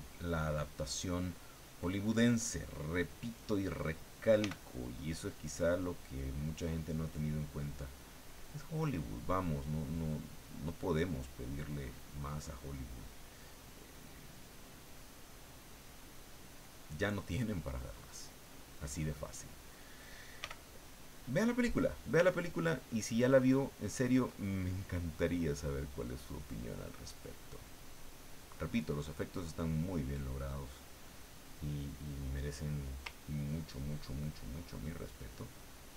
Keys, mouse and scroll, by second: 0.3 click, 1.0 click, 1.6 click, 2.5 click, 4.4 f, 4.9 click, 5.6 click, 6.9 click, 7.5 click, 8.1 click, 8.7 click, 9.5-10.7 drag, 10.9 click, 11.4 click, 12.4 click, 13.7 click, 14.4 click, 14.9 click, 15.3 click, 16.3 click, 18.2 click, 18.8 click, 20.4 f, 21.4 click, 22.5 ctrl+click, 23.5 ctrl+click, 25.3-26.5 drag, 27.8-31.4 drag, 31.6 click, 33.4-35.5 ctrl+drag.